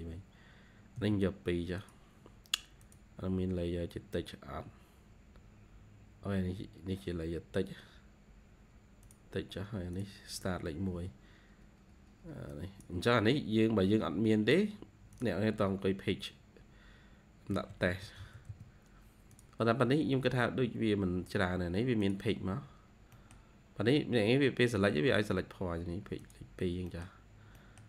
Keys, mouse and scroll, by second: 0.9 2, 5.3-6.6 scroll down 10, 6.8-8.0 scroll up 7, 10.8 1, 17.2-18.9 typing, 20.3-20.9 scroll up 2, 20.7 typing, 22.4-22.9 scroll down 2, 22.9 typing, 23.0 middle click, 23.2 scroll down 1, 23.8-24.4 scroll up 2, 25.0-25.4 scroll up 2, 26.4-26.8 scroll down 1, 26.8 middle click, 27.5 middle click.